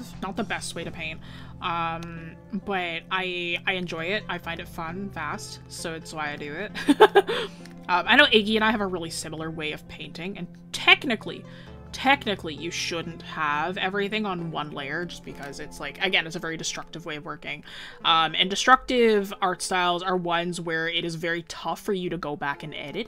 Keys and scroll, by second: 15.1 scroll down 1.